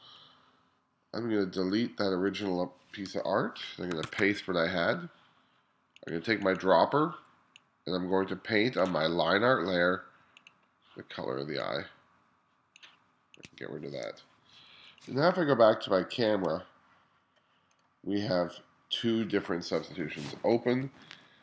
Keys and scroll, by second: 3.1 BackSpace, 4.2 super+v, 14.1 BackSpace, 20.1 [, 20.9 ].